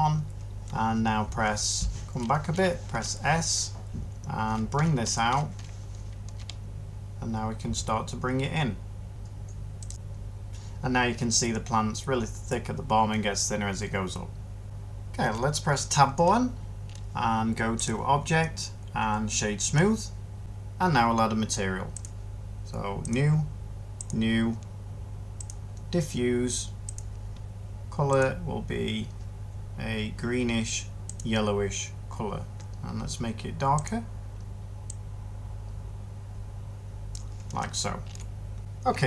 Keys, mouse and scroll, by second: 2.8 s, 15.1 Tab.